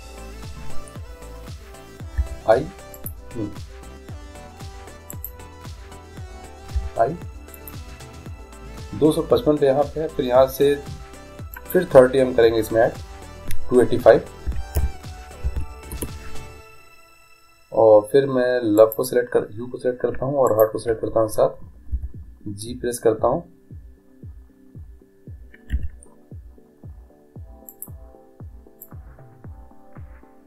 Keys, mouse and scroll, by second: 3.1 i, 5.2 right click, 5.4-6.8 drag, 6.8 right click, 6.8 i, 7.7 i, 11.7-13.5 drag, 18.9-22.6 right drag, 22.0 g, 28.9-30.4 drag.